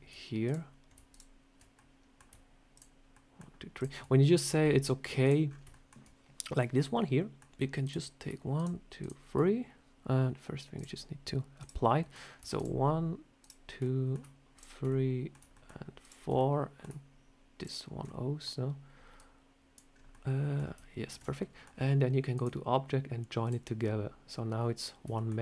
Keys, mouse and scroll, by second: 0.3 shift+click, 0.4 click, 1.0 shift+click, 1.7 middle click, 2.6 shift+click, 3.0 shift+middle click, 3.7 shift+click, 4.3 scroll down 4, 4.5 middle click, 5.1 click, 5.4 scroll up 4, 5.6 shift+middle click, 6.7 middle click, 7.7 click, 8.5 shift+click, 10.7 shift+click, 11.5 click, 11.9 middle click, 12.5 shift+click, 12.5 shift+click, 13.7 middle click, 14.5 shift+click, 14.8 middle click, 15.4 shift+middle click, 15.9 shift+click, 16.3 middle click, 17.5 shift+click, 18.0 middle click, 19.1 click, 19.8 scroll down 2, 20.0 middle click, 21.0 ctrl+z, 21.3 middle click, 22.3 click, 25.1 shift+middle click.